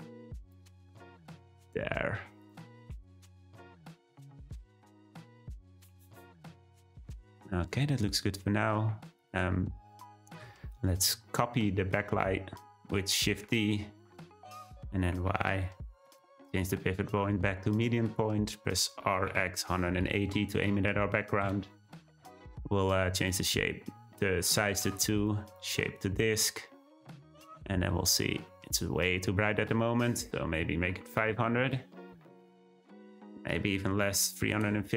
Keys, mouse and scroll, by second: 0.4 click, 2.4 click, 2.8 g, 4.1-5.6 drag, 5.8 g, 7.2 click, 7.7-8.2 middle drag, 8.2-8.8 scroll down 3, 9.2 click, 9.5-12.5 shift+middle drag, 13.3 shift+d, 16.6 ., 19.0 r, 23.2-25.2 drag, 25.4-27.1 drag, 27.1 `, 28.3 scroll up 2, 29.6 click, 31.2 0, 33.2-34.9 drag.